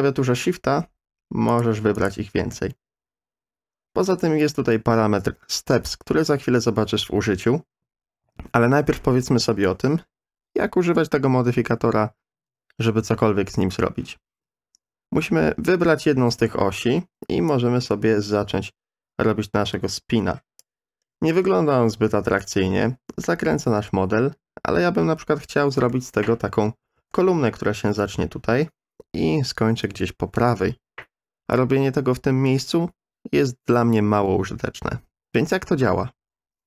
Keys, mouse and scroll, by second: 1.5 shift+click, 2.0 shift+click, 15.7 middle click, 17.5-20.6 drag, 25.9 middle click, 26.9 ctrl+z.